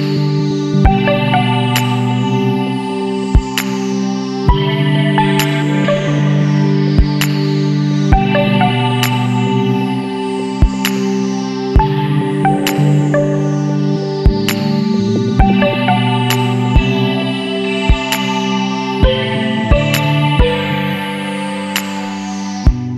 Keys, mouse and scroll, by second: 0.7 click, 1.8 click, 3.3 click, 4.2 KP_Subtract, 4.5 KP_1, 4.9 KP_Enter, 5.7 scroll down 2, 6.9 click, 7.7 KP_Subtract, 8.1 KP_1, 8.5 KP_Enter, 9.4-9.8 scroll up 2, 10.7 click, 12.2 click, 13.8 click, 15.6 click, 16.6 KP_Subtract, 17.1 KP_1, 17.6 KP_Enter, 18.5 scroll down 2, 19.8 click, 20.7 click.